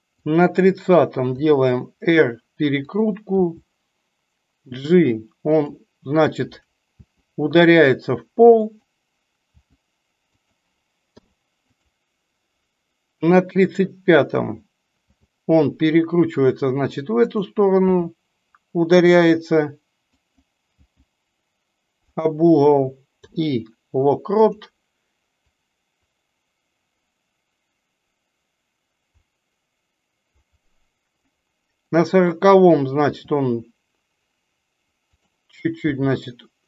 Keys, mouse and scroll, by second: 13.2 click, 25.4-31.2 drag.